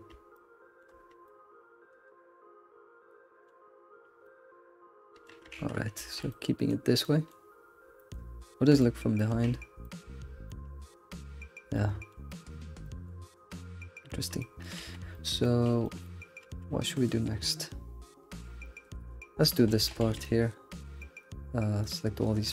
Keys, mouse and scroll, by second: 0.3 shift+middle click, 1.0 scroll down 1, 1.2-5.5 shift+middle drag, 5.5 ctrl+s, 5.8 scroll down 2, 6.0 alt+shift+z, 6.3 middle click, 6.9 scroll down 1, 7.0 middle click, 7.7-8.8 scroll down 6, 8.0 shift+middle click, 8.8 shift+middle click, 9.6-11.3 scroll up 9, 9.8 shift+middle click, 10.5 shift+middle drag, 11.3-11.7 scroll down 1, 11.7-14.8 shift+middle drag, 15.1 alt+shift+z, 15.1 middle click, 15.6 shift+middle click, 16.8-18.1 scroll up 1, 18.1 scroll up 2, 20.2 click, 21.2 shift+click, 21.8 shift+click.